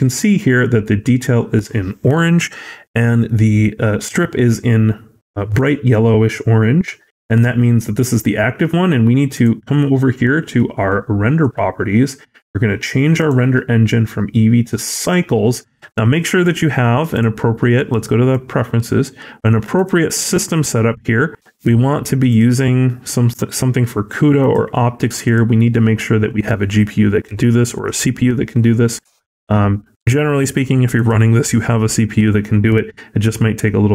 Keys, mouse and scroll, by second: 9.2 click.